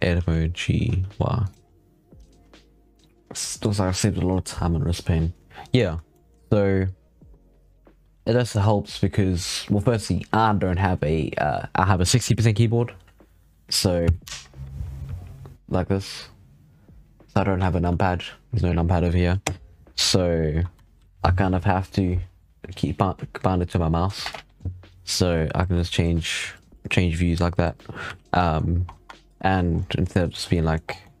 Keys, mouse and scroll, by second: 0.0 g, 1.5 scroll up 7, 2.0 g, 5.4 scroll down 7, 5.6 scroll up 9, 6.0-9.1 shift+middle drag, 27.2-27.5 scroll down 6, 27.9 z, 28.3 shift+middle drag, 28.5-28.8 scroll up 2, 28.8 Tab, 29.0-29.7 scroll down 7, 29.7-30.3 middle drag, 30.3 scroll up 2, 30.4 middle click, 30.7 scroll down 7, 30.9 middle drag, 31.1 scroll up 1.